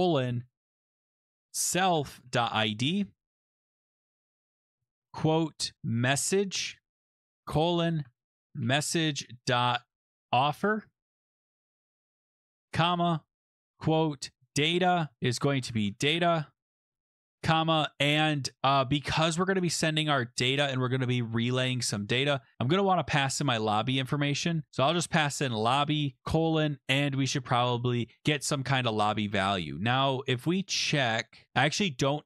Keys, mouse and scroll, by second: 0.0-3.1 typing, 4.1 Escape, 4.7-19.3 typing, 6.8 Escape, 7.0 Right, 19.7 Return, 22.6-24.3 typing, 22.7 Return, 24.9 Tab, 25.9-26.7 typing, 28.2 :, 28.4-29.6 scroll.